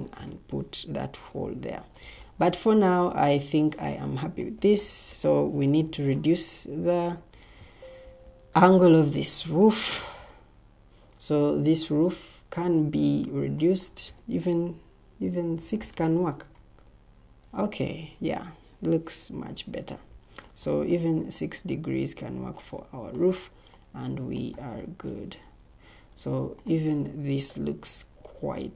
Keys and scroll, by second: 0.0 Escape, 7.2 Escape, 7.9 Escape, 9.3 ctrl+t, 15.5 6, 15.7-20.4 Return, 17.7 Escape, 19.2 o, 25.6 Escape, 27.2 ctrl+t.